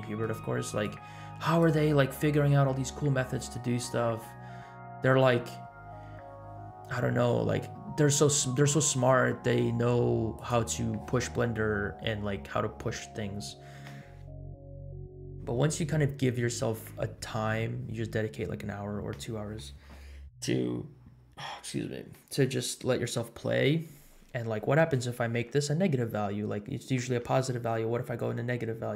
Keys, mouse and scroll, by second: 0.8 click, 3.6 scroll up 1, 5.1 space, 7.0-8.1 scroll down 4, 8.1-8.5 drag, 10.4 click.